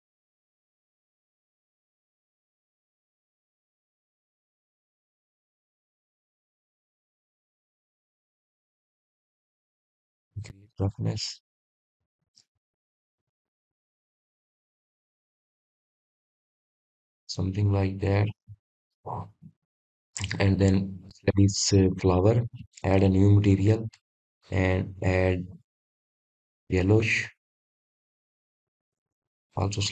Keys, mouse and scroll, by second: 1.7-3.0 shift+middle drag, 3.0-4.5 scroll up 2, 4.5-4.9 drag, 6.1 click, 8.2 click, 9.1 click, 15.5-16.6 scroll down 4, 18.4-20.2 drag, 21.7-23.0 scroll down 3, 23.0-28.3 drag, 29.1-29.9 drag.